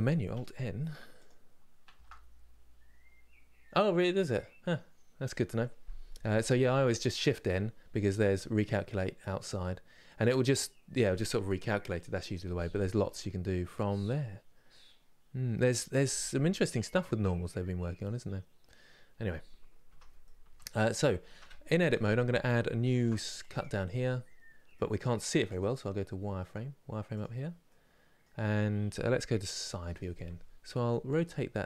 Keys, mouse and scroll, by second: 0.9 click, 19.5 Tab, 19.9 middle click, 20.6 click, 20.9 Tab, 21.6 middle click, 22.6 ctrl+r, 24.4 middle click, 24.9 scroll up 2, 26.8 click, 27.4-29.2 middle drag, 29.2 KP_3, 30.4 r.